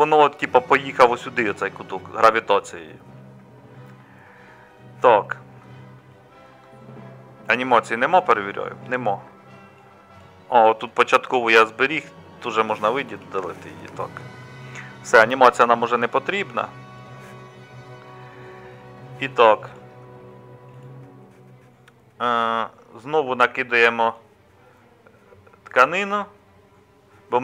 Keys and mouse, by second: 13.2 Delete.